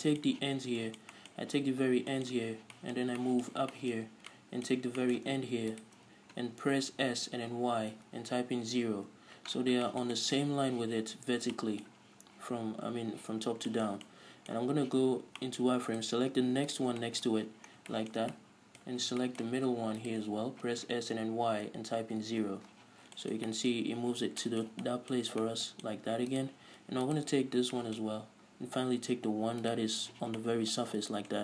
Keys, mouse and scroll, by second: 0.1-6.0 middle drag, 0.6 z, 2.1 scroll down 2, 2.7 z, 4.2-4.6 scroll up 2, 6.0 shift+right click, 7.1 s, 9.3 Return, 9.8-10.1 scroll down 2, 10.1-16.1 shift+middle drag, 11.6 scroll down 2, 13.7 scroll up 2, 15.1 z, 16.1-17.2 right drag, 17.2-20.2 middle drag, 17.6 z, 17.9 scroll down 2, 19.1-19.4 scroll up 2, 20.2 shift+right click, 20.9 s, 22.7 Return, 23.2 scroll down 1, 23.4-26.6 shift+middle drag, 24.0-24.4 scroll up 1, 26.6 right click, 27.7 scroll down 1, 28.0-29.9 shift+middle drag, 28.4-29.9 scroll up 2, 29.9 shift+right click, 30.6 middle click.